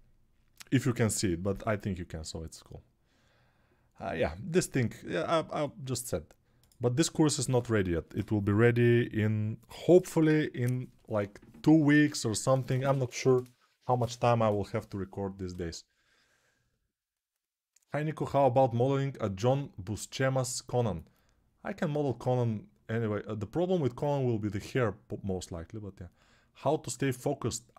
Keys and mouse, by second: 6.4-27.7 drag.